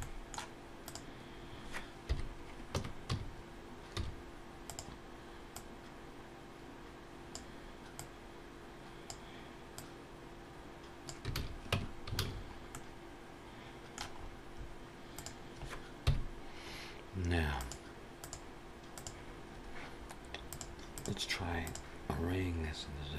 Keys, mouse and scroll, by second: 0.6 click, 1.9 KP_1, 2.5 Tab, 2.9 a, 3.9 s, 5.3 click, 7.8 click, 9.6 click, 11.2 alt+a, 11.8 Tab, 12.0 alt+a, 12.1-12.5 scroll down 5, 12.5 middle click, 14.0-14.7 scroll up 6, 15.0 click, 15.9 KP_1, 17.4 click, 20.3 click, 21.3 click.